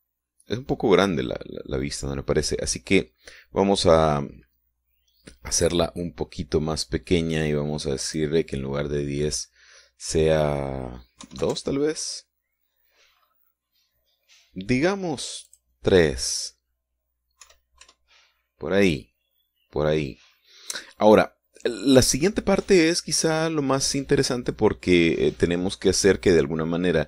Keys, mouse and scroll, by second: 0.4-1.0 scroll down 2, 1.8-2.1 scroll up 2, 5.6 scroll down 2, 8.9 click, 12.1 KP_2, 12.2 KP_Enter, 14.0-14.6 scroll up 2, 15.3-16.4 scroll down 2, 16.4 click, 18.3 KP_3, 18.7 KP_Enter, 20.4-20.7 scroll down 2, 20.9-21.5 scroll down 2, 21.5 scroll up 2, 22.2-27.0 scroll down 2.